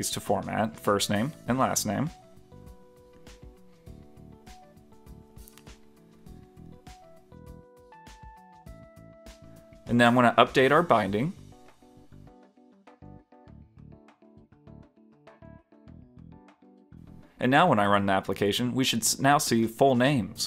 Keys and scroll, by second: 8.7 super+s, 14.5 super+s, 15.0 super+s, 15.5 super+Return, 16.1 super+Return.